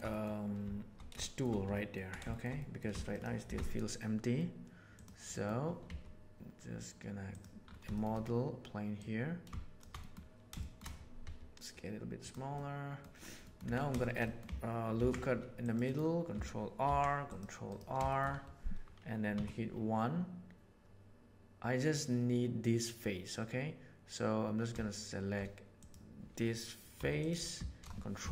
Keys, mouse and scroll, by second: 0.1 middle click, 1.2 shift+middle click, 1.7 ctrl+middle click, 2.3 shift+middle click, 2.6 middle click, 3.1 shift+click, 3.4 shift+a, 5.3 middle click, 5.8 s, 7.6-8.0 shift+middle drag, 8.1 middle click, 9.1 click, 10.0 click, 10.6 shift+middle click, 11.2 s, 12.5 middle click, 13.4 middle click, 13.6 Tab, 14.0 shift+middle click, 14.2 middle click, 14.9 ctrl+r, 16.8 ctrl+r, 18.0 shift+middle click, 19.3 1, 25.8 right click, 27.0 3, 27.2 right click.